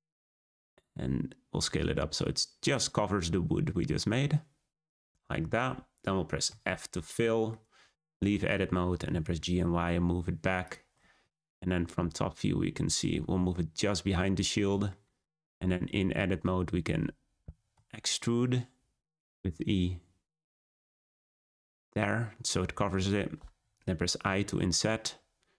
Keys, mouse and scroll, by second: 6.4 f, 6.9 middle click, 7.7 Tab, 8.3 shift+middle click, 8.9 g, 11.3 `, 13.0-13.5 scroll up 5, 13.5-15.4 shift+middle drag, 15.4 Tab, 15.7-17.7 scroll down 2, 17.7 e, 21.9-24.2 middle drag.